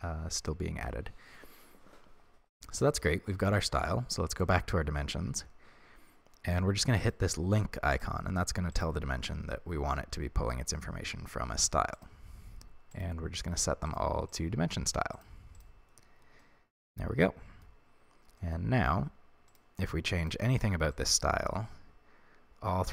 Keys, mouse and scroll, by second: 8.0 click, 8.8 click, 13.1-16.5 drag, 16.5-21.0 middle drag, 18.0-18.4 scroll up 1, 21.0 click.